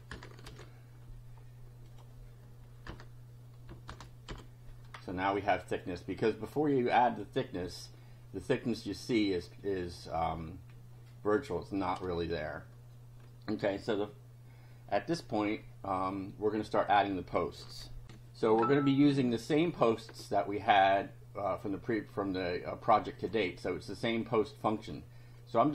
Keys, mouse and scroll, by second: 0.0-0.4 typing, 0.4 ctrl+v, 1.9 click, 3.0 Return, 4.0 shift+], 4.3 shift+F5, 5.4 click, 6.5 click, 10.4-11.5 drag, 18.0 ctrl+r, 23.2 click, 25.4-25.7 drag.